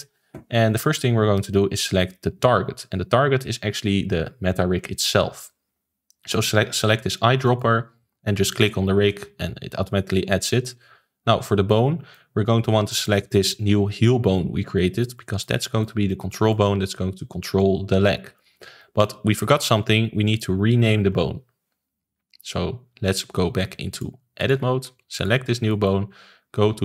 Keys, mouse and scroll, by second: 7.4 click, 12.1-21.7 middle drag, 23.9-25.2 drag, 25.6-26.8 shift+middle drag.